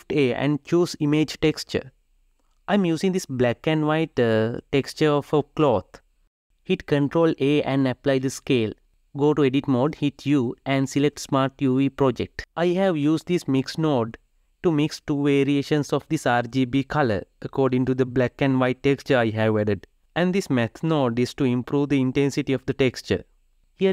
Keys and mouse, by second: 2.7 drag, 5.9 Tab, 7.1 ctrl+a, 9.4 Tab, 10.4 u, 15.2 shift+a, 16.5 BackSpace, 20.2-21.2 drag, 21.8-22.9 drag.